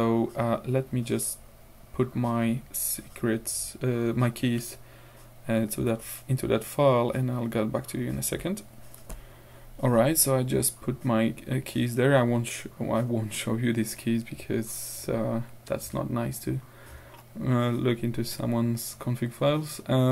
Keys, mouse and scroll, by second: 9.1 ctrl+alt+r.